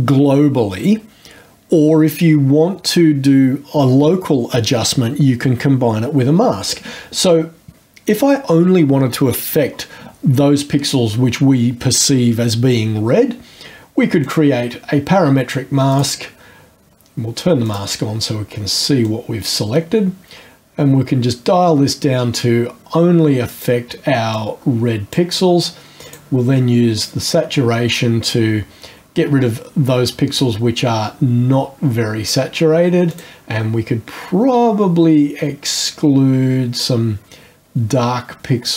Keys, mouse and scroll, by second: 14.2 click, 14.8-15.3 scroll down 1, 15.9 click, 17.7 click, 19.1-23.8 drag, 24.3-25.3 drag, 26.1 click, 27.9-32.5 drag, 33.1 click, 36.8-38.7 drag.